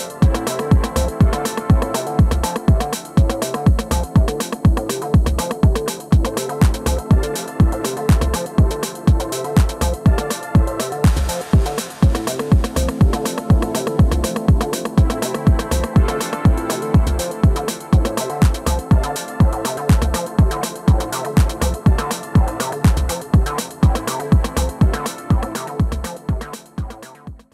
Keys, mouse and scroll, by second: 0.5 f, 1.1 middle click, 1.4 f, 1.6-4.2 drag, 2.0-3.0 middle drag, 3.6 middle click, 4.3 middle click, 4.5-5.6 drag, 5.4-6.5 middle drag, 5.7 click, 6.3 f, 6.5 click, 6.9 middle click, 7.8 alt+w, 8.4 f, 8.7-11.0 drag, 8.7 middle click, 11.0 middle click, 12.1 f, 12.2 click, 13.0-14.7 middle drag, 17.9-22.0 middle drag.